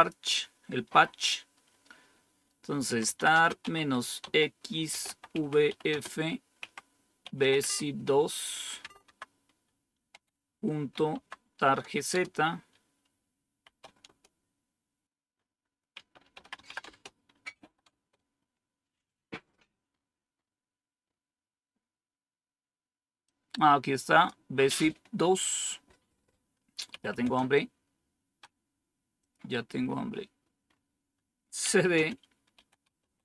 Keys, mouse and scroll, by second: 2.7-9.0 typing, 10.6-12.0 typing, 13.1-14.0 typing, 15.0-15.9 scroll down 1, 15.9 scroll down 1, 15.9-17.9 typing, 19.5-20.4 scroll up 3, 21.0-21.8 scroll up 2, 22.9-23.7 typing, 23.2-24.2 drag, 26.8-27.5 typing, 29.1 click, 29.4 click, 29.4-31.6 scroll down 1, 31.3-33.2 typing.